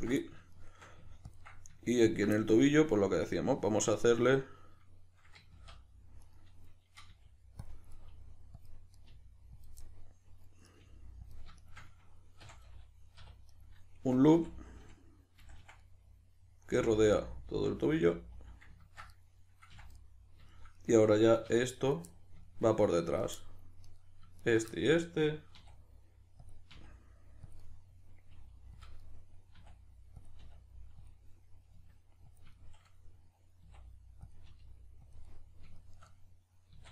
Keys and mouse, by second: 0.1-1.3 middle drag, 1.3-2.3 ctrl+drag, 2.3-6.2 middle drag, 5.5 ctrl+z, 6.2 right click, 7.0 g, 7.6 click, 7.9 right click, 8.0 g, 8.6 click, 8.9 right click, 9.0 g, 9.6 click, 9.8 middle click, 10.6 right click, 10.8 g, 11.3 click, 11.6 shift+right click, 12.4 f, 13.5 right click, 14.3 f, 15.8-19.1 middle drag, 16.7 f, 17.5 f, 19.1 right click, 19.7 f, 19.9-21.7 middle drag, 21.5 1, 21.7 right click, 22.1-23.1 middle drag, 23.1 shift+right click, 23.4-23.9 middle drag, 23.9 right click, 24.4 shift+right click, 24.7-26.5 shift+middle drag, 25.5 e, 26.5 click, 26.7 e, 27.5 click, 27.6-28.9 middle drag, 28.3 r, 28.9 click, 29.0-30.3 middle drag, 29.5 e, 30.3 click, 30.4 r, 31.1 click, 31.7 s, 32.4 click, 32.5-34.3 shift+middle drag, 33.7 e, 34.3 click, 34.5 r, 35.1 click, 35.3-36.9 middle drag, 36.7 e.